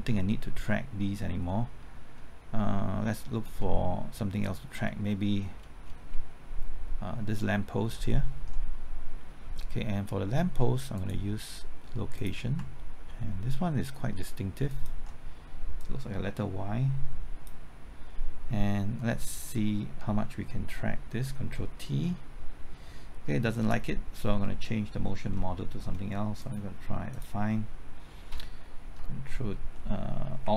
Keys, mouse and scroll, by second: 0.3-0.9 scroll up 1, 1.5-2.6 middle drag, 3.4-4.7 scroll down 1, 4.7-5.1 scroll up 1, 5.1 middle click, 5.4 scroll down 1, 5.5-6.1 scroll up 1, 10.9 click, 14.7 ctrl+click, 15.8-17.6 drag, 21.9 ctrl+t, 23.6 ctrl+z, 25.3 middle click, 26.4 click.